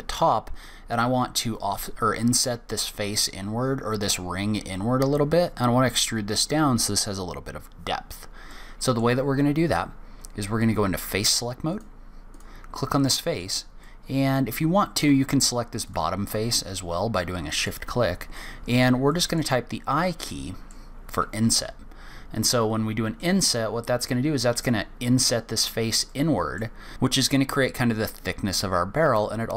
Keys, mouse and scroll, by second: 8.5 middle click, 9.4-9.7 scroll up 1, 11.7 click, 12.3 click, 13.8 middle click, 15.8 shift+click, 17.2 middle click, 18.3 middle click, 19.1 middle click, 20.0 middle click, 21.5 i, 26.1 middle click, 26.9-29.5 scroll up 2.